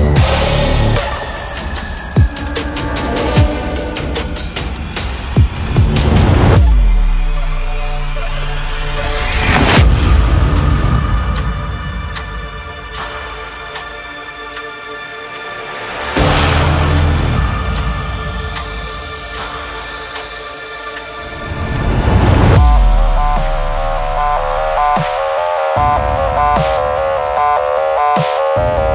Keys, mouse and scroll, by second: 1.0 Return, 1.5 Right, 4.3 click, 7.5 scroll up 1, 7.9 click, 8.4-11.9 typing, 13.1 click, 13.4 scroll down 1, 13.8-15.6 drag, 15.6 ctrl+t, 16.2 click, 17.2 Return, 17.7 click, 22.9-25.4 drag.